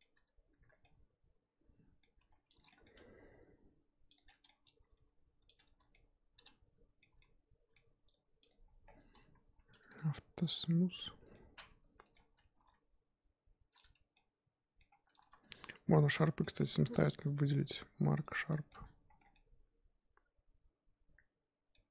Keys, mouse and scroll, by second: 0.1 Tab, 0.4 scroll up 1, 0.8-2.2 middle drag, 2.2 2, 2.5 click, 2.7-4.1 middle drag, 4.1 ctrl+click, 4.2-4.8 middle drag, 4.8 g, 5.6 Tab, 5.8 scroll down 2, 5.9-7.1 middle drag, 7.1 z, 7.2-8.5 middle drag, 8.5-10.4 right drag, 10.4 click, 11.0-11.3 middle drag, 11.3 scroll down 1, 11.5-11.8 scroll up 1, 11.8 Tab, 12.0 middle click, 12.2-12.5 scroll up 2, 12.6 g, 13.8 Tab, 14.2-14.9 middle drag, 14.9 Tab, 15.7 alt+click, 16.0 scroll down 1, 16.1-18.3 middle drag, 18.3 right click, 18.5 middle drag, 18.7 Tab, 19.2 scroll down 4, 19.3-21.8 middle drag, 21.8-21.9 scroll up 1.